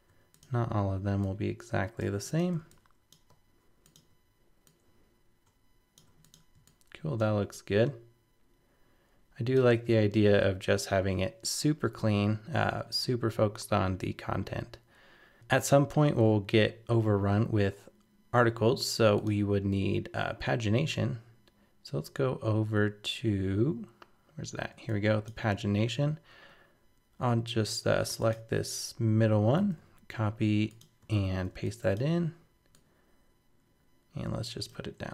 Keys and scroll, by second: 29.6 super+c, 31.1 super+v.